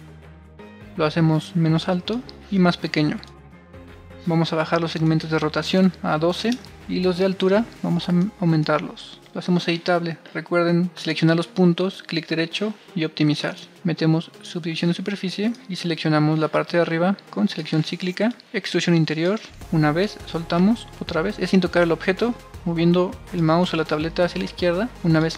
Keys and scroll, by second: 5.4-6.3 typing, 9.1 Return, 9.1 c, 13.0-13.7 typing.